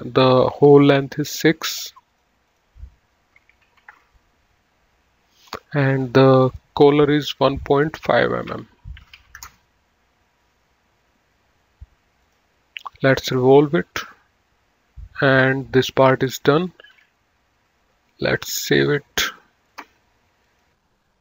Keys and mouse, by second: 1.0 click, 2.4 click, 4.0 KP_6, 4.2 Return, 6.1 click, 9.2 KP_1, 9.3 KP_Decimal, 9.5 KP_5, 9.7 Return, 12.5 click, 15.6 click, 20.0 click.